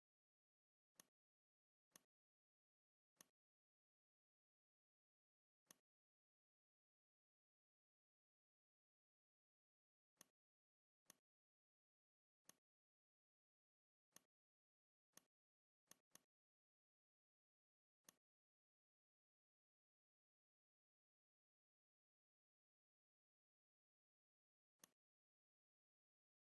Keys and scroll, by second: 8.4 shift+m, 11.9 v, 16.8 v, 22.5 ctrl+g, 24.1 ctrl+z.